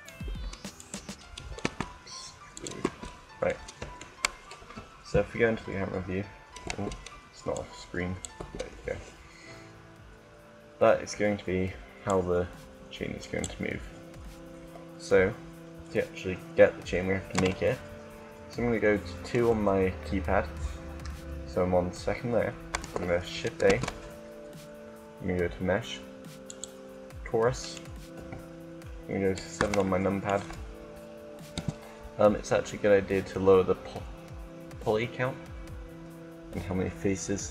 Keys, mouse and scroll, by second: 0.2 Tab, 0.9 right click, 1.6 e, 2.9 Tab, 4.5 KP_0, 6.6 Tab, 8.2 Tab, 9.6-11.3 middle drag, 11.8-13.5 drag, 13.6 click, 17.0 KP_1, 19.4 2, 23.3 shift+a, 27.9 KP_7, 31.4 t, 37.3 click.